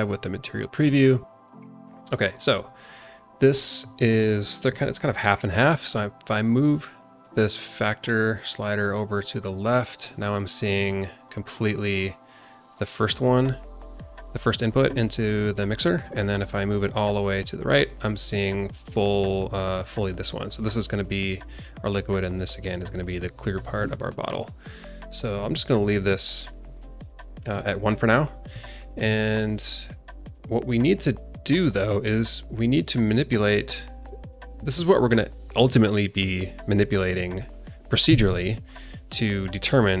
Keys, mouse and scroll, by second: 0.1-0.6 scroll up 4, 0.9 scroll down 1, 1.2-3.4 alt+middle drag, 4.0 click, 4.6 scroll up 2, 4.8-7.2 scroll down 1, 7.2-8.4 drag, 9.1 click, 9.9-10.3 scroll down 1, 10.7 click, 15.5 click, 16.3-18.4 drag, 19.2 click, 20.5 click, 21.4 click, 22.2 click, 22.8 click, 24.3 click, 25.1-27.1 drag, 27.3 click, 28.0-28.4 scroll down 3, 28.6 shift+middle click, 31.2-31.6 scroll up 2, 32.1 click, 32.8-40.0 drag.